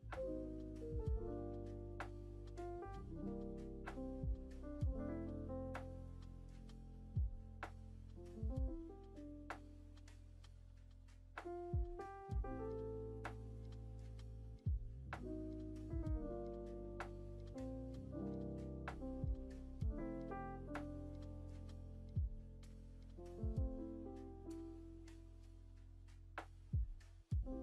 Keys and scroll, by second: 1.3 ctrl+v, 18.2 Down, 21.5 s.